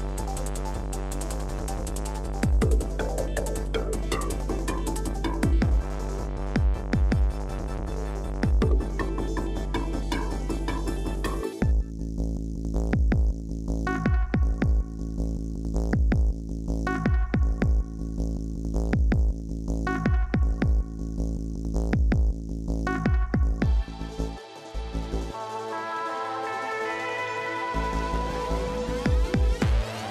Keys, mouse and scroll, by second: 10.7 ctrl+t, 17.5 alt+click.